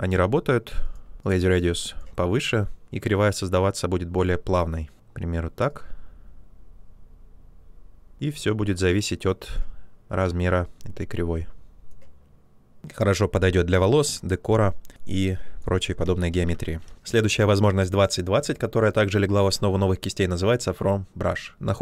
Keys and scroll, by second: 15.9 ctrl+z.